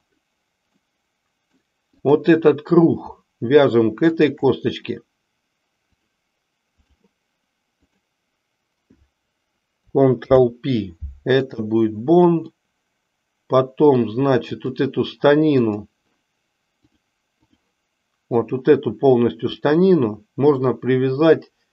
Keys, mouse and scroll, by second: 0.8-1.7 middle drag, 2.1 click, 4.2 shift+click, 5.9-6.9 drag, 10.2 ctrl+p, 12.4-14.2 middle drag, 14.5 click, 15.5 click, 16.8 click, 18.3 click, 19.5-20.8 middle drag.